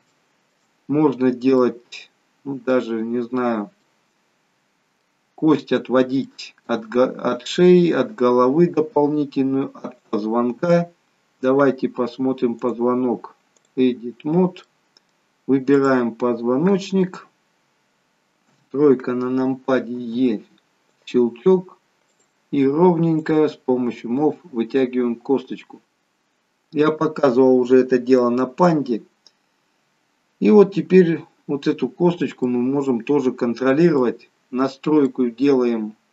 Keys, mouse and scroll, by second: 0.7-1.4 scroll up 2, 1.4 middle click, 3.3-3.7 scroll down 1, 3.7 middle click, 5.5 middle click, 6.3 shift+middle click, 9.9 click, 12.6 click, 14.6 middle click, 15.7 click, 18.4 KP_3, 19.9 e, 22.1 click, 23.2 click, 25.8 middle click, 32.4 middle click, 34.2-34.7 scroll up 2, 35.3 middle click.